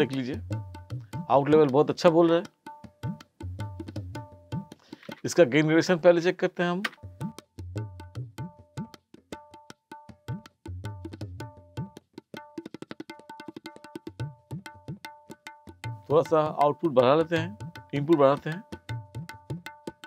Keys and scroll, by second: 5.1 space, 6.9 space.